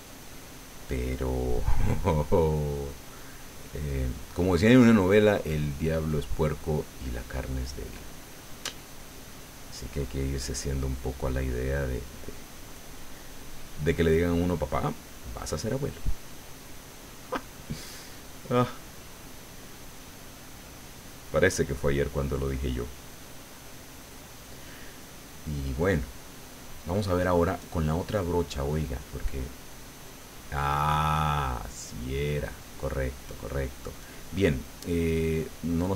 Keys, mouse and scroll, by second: 2.0 click, 2.8 click, 3.9 click, 4.3 click, 4.7 click, 5.6 click, 6.3 middle click, 7.4-8.6 middle drag, 9.0-10.7 drag, 11.4-13.1 drag, 13.4-14.4 drag, 15.4-16.6 drag, 16.6 middle click, 18.1 click, 18.9 click, 20.0 click, 21.5-24.5 drag, 24.6 middle click, 25.7 middle click, 26.7 right click, 27.2 click, 27.6 click, 28.5 click, 29.4-31.2 drag, 31.4 middle click, 32.7 click, 34.0 click, 35.2 click, 35.7-35.9 drag.